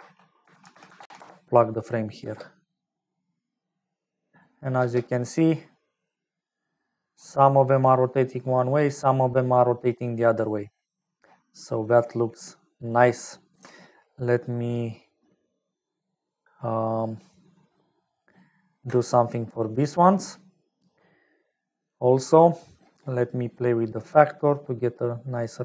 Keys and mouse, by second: 2.5 space, 5.4 space, 6.4-9.3 drag, 11.5 middle click, 12.5 middle click, 14.0 ctrl+alt+click, 15.1-16.3 ctrl+alt+drag, 16.9 ctrl+alt+click, 18.3 ctrl+alt+click, 21.1 middle click, 22.5 middle click, 24.1 click, 24.5 click.